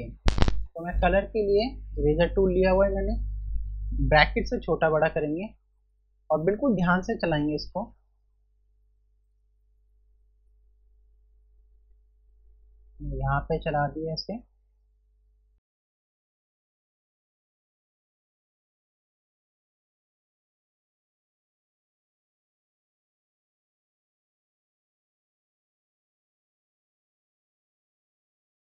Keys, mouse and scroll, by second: 4.1-5.9 typing, 4.9 scroll up 1, 5.6 click, 6.3 scroll down 1, 7.1 typing, 8.8 click, 15.6 space, 15.6 click, 17.0 typing, 17.1 click, 21.0-21.5 typing, 21.1 click, 21.6 click, 23.9-25.0 typing, 23.9 click, 24.1 click, 24.6 click, 25.1 click, 26.6 space, 26.6 click, 26.7 space, 27.0 click, 28.7 [.